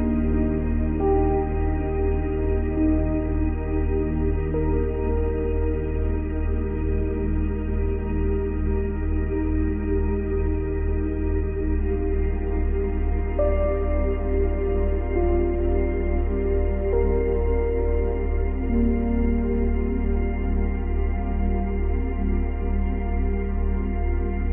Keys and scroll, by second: 1.8 space, 3.8 space, 4.8 space, 8.5 space, 9.4 space, 14.2 space, 17.6 space, 18.8 space, 23.5 space.